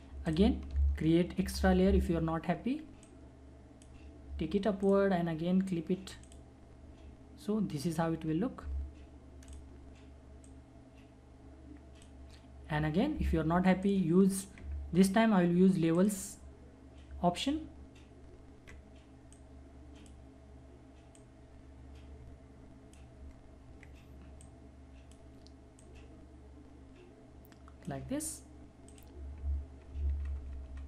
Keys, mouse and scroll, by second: 1.4 ctrl+j, 3.1-4.8 drag, 9.5-13.8 drag, 19.3-24.4 drag, 24.4-28.9 drag, 30.1 ctrl+-.